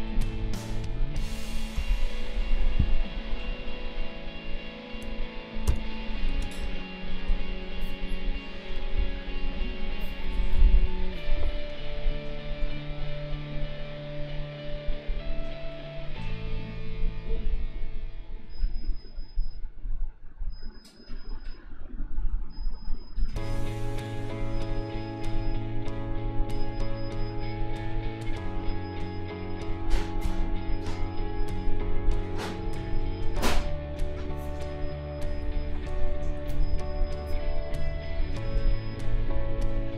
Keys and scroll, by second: 1.7 i, 5.6 b, 6.4 space.